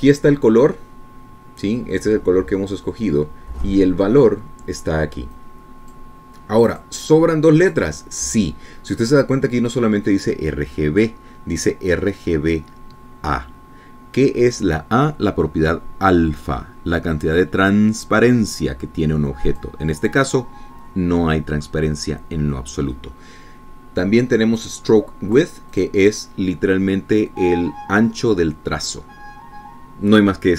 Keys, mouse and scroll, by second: 6.8 click, 8.2 click, 9.1 click, 20.9 click, 26.1 click, 27.2 click.